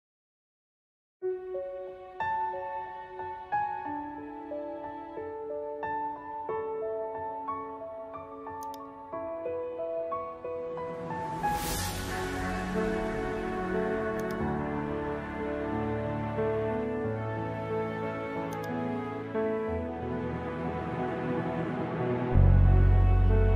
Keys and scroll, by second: 0.4 space, 4.0 space, 8.7 ctrl+-, 9.9 ctrl+-, 10.3 space, 21.1 ctrl+-.